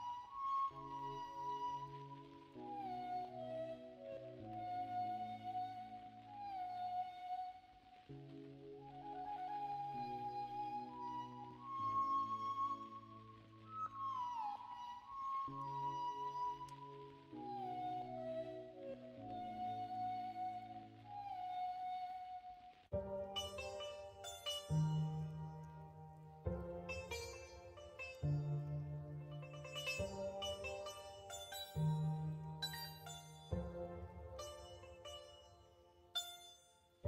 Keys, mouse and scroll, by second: 6.4-12.8 middle drag, 13.4 Tab, 13.6 middle drag, 14.3 middle click, 16.7 ctrl+KP_Subtract, 20.9-21.2 middle drag, 21.6-22.0 middle drag, 22.5 middle click, 24.2 ctrl+z, 25.6 middle click, 26.4 Tab, 27.4 2, 28.8 x, 30.2 x, 32.5 x, 33.6 middle click, 34.3 Tab.